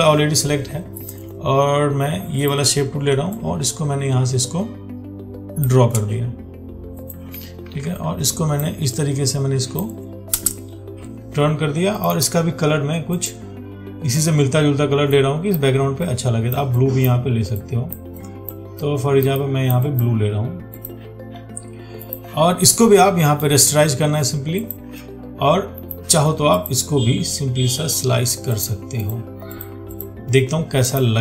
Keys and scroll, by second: 7.9 ctrl+t.